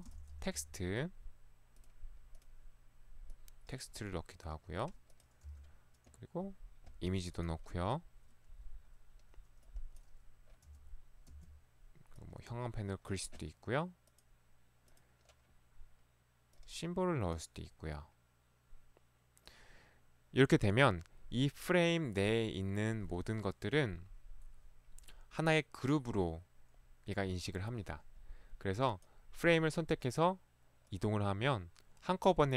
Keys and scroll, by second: 0.2-0.6 typing, 5.5 i, 10.7 s, 11.3 s.